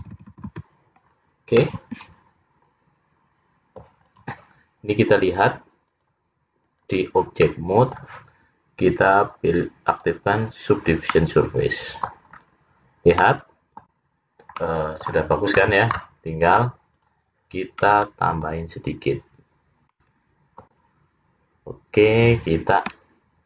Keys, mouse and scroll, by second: 0.7 f, 1.1-1.6 scroll down 2, 1.6 middle click, 4.1 click, 5.9 click, 7.5 middle click, 10.3 click, 11.2 middle click, 12.5-13.0 scroll up 4, 13.3 middle click, 14.7 middle click, 16.5 click, 17.9 middle click, 19.0 scroll up 3, 20.0 middle click.